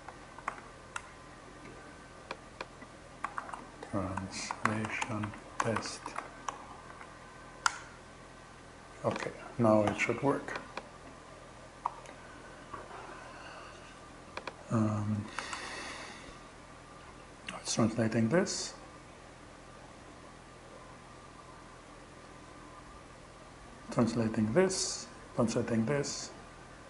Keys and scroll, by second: 0.0-0.4 typing, 2.4-6.3 typing, 7.1 Return, 11.3 super+v, 14.8 shift+Return.